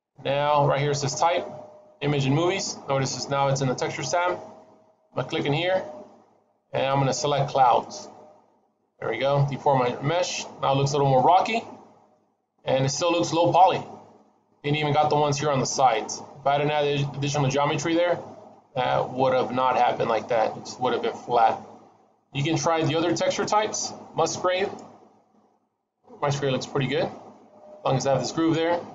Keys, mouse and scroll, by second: 5.2 click, 8.7 middle click, 9.3-11.0 scroll up 3, 9.6 middle click, 11.0 middle click, 13.8 scroll down 2, 14.1 middle click, 16.1 middle click, 17.4 middle click, 22.6 click, 25.1-25.4 scroll down 1, 25.4 middle click.